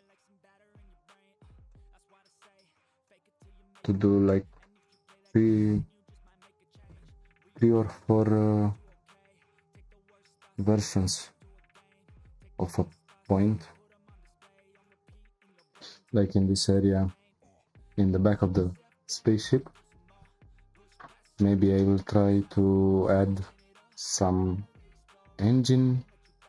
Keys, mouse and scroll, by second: 14.0 p, 15.1-18.2 shift+middle drag, 21.4-22.6 shift+middle drag, 22.6-23.9 scroll up 2, 23.9-25.2 scroll up 1, 25.2-25.7 scroll up 1.